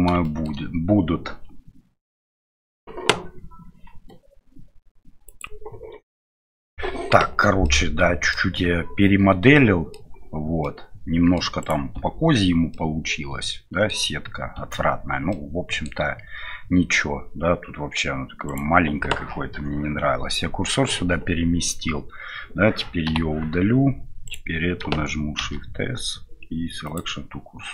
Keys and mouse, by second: 0.2 shift+middle drag, 7.6-8.3 middle drag, 9.5-10.0 middle drag, 10.7-11.4 middle drag, 11.6 right click, 11.9 Tab, 12.7-13.9 middle drag, 14.6 Tab, 15.3-15.8 middle drag, 23.1 Delete, 25.4 shift+s.